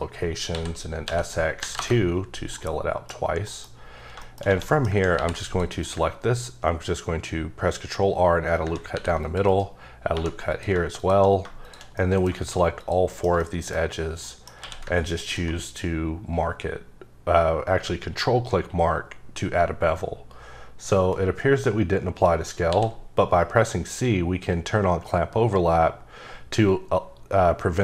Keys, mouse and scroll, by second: 0.5 s, 1.0 x, 1.6 KP_2, 1.7 KP_Enter, 2.5 middle click, 3.4 middle click, 4.2 shift+middle click, 4.7 middle click, 5.1 ctrl+r, 5.4 click, 5.7 right click, 8.9 ctrl+r, 9.2 click, 9.5 right click, 10.1 2, 10.5 click, 11.6 shift+click, 12.0 middle click, 12.8 shift+click, 13.1 shift+middle click, 13.4 shift+double middle click, 14.2 middle click, 14.6 q, 15.2 click, 16.5-19.1 scroll up 6, 22.7 c, 24.3-24.9 scroll up 5, 25.0-25.7 scroll down 4, 25.7-26.9 scroll up 7, 26.9-27.7 scroll down 4, 27.7-27.8 scroll up 7.